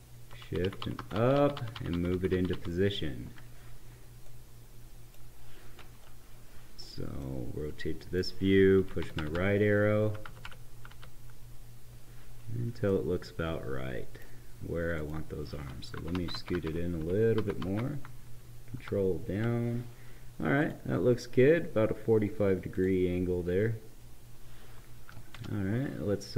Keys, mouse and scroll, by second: 4.2-8.8 right drag, 8.8 Right, 12.8-14.9 right drag, 14.9 click, 15.8 Left, 18.6 ctrl+Down, 20.6 click.